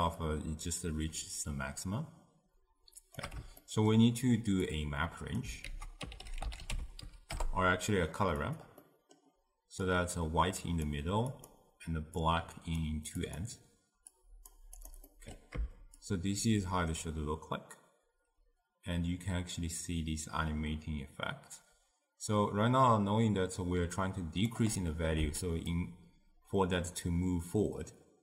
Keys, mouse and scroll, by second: 0.2-3.2 shift+drag, 3.6-4.7 ctrl+middle drag, 4.7 click, 5.7 ctrl+a, 8.9-9.9 middle drag, 9.9-13.4 drag, 14.8 drag, 15.1-16.0 middle drag, 16.0-19.1 shift+drag, 25.7-28.2 shift+drag.